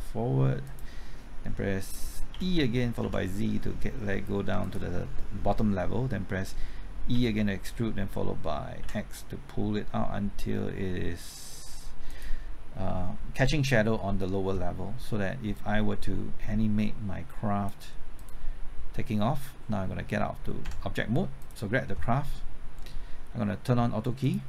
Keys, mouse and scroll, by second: 0.6 click, 2.3-3.0 typing, 4.6 click, 7.1 typing, 8.5-9.3 typing, 12.0-18.1 drag, 20.6 Tab, 21.4 click.